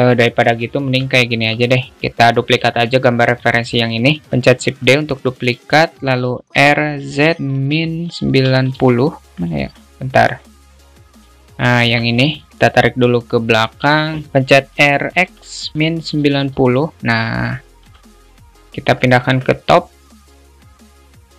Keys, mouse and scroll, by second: 1.0 shift+middle click, 1.8 shift+middle click, 2.7 click, 3.8 alt+shift+middle click, 6.6 r, 9.3-9.7 alt+middle drag, 10.5-11.4 drag, 12.2 ctrl+z, 12.5 alt+shift+middle click, 12.6 g, 19.4 alt+shift+middle click, 20.0-21.3 drag.